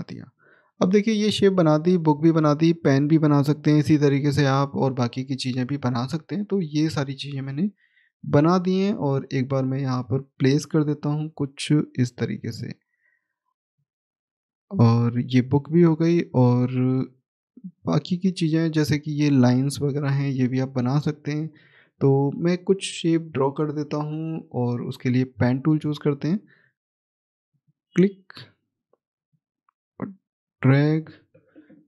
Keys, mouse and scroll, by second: 0.2 click, 1.6-3.2 scroll down 1, 3.3 middle click, 6.5 shift+click, 9.1-9.9 scroll up 1, 9.9 click, 14.0 middle click, 15.3 scroll down 1, 16.0 middle click, 18.0-20.2 scroll up 1, 20.8 scroll down 1, 20.8 middle click, 24.6 middle click, 24.6 click, 25.6 middle click, 25.6-27.4 scroll up 1, 27.4 click, 31.7 click.